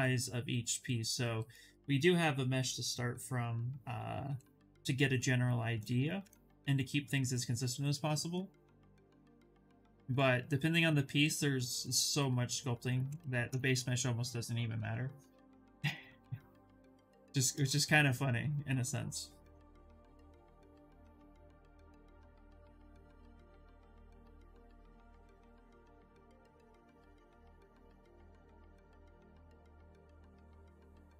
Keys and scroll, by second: 13.9 shift+f, 15.0 d, 23.2 ctrl+d.